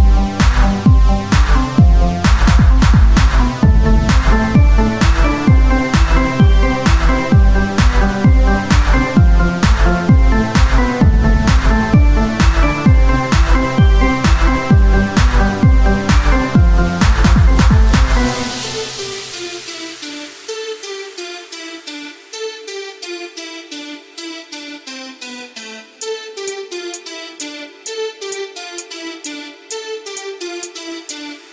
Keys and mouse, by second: 0.4 Tab, 1.7 click, 5.8 Tab, 8.5 Tab, 12.7 Tab, 13.4 Tab, 13.4 Tab, 13.9 KP_Divide, 15.4 ctrl+r, 17.5 ctrl+r, 17.5 ctrl+Tab, 20.5 ctrl+b, 20.5 ctrl+Tab, 21.3 click, 23.0 e, 25.9 e, 28.9 e, 30.4 click, 31.3 Tab.